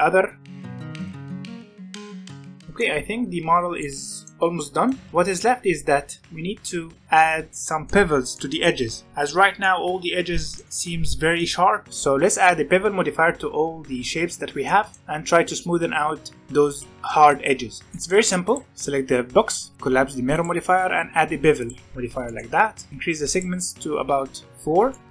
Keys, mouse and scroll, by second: 0.4 click, 0.5 click, 1.9 middle drag, 2.2 alt+a, 2.3 middle click, 3.0-3.7 scroll down 1, 3.7-5.0 middle drag, 5.0-7.1 scroll up 1, 7.3 scroll down 2, 7.6-8.1 middle drag, 8.1 scroll up 2, 8.3-9.3 middle drag, 9.3 scroll up 2, 9.6-13.8 middle drag, 14.6-16.8 middle drag, 17.1-18.4 shift+middle drag, 18.4 click, 19.6-22.2 drag, 22.2 shift+middle drag, 22.5 scroll up 2, 22.9-24.9 drag, 24.9-25.1 middle drag.